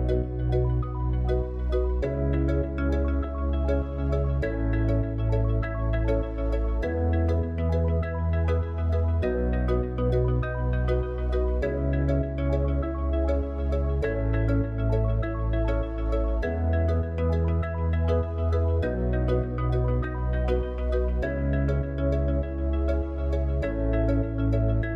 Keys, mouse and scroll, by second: 4.9-8.9 drag, 9.6-18.4 drag, 18.4-20.9 middle drag, 22.3 click.